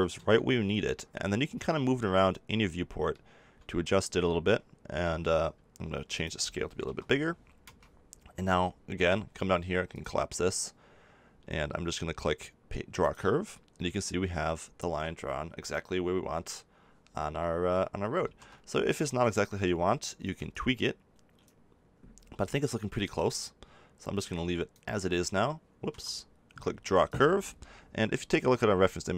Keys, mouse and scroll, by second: 6.1-8.0 drag, 9.9-11.7 drag, 11.7-13.0 middle drag, 13.0-14.8 drag, 18.2 ctrl+z, 23.1-25.0 drag, 27.0-28.8 drag, 28.8-29.1 middle drag.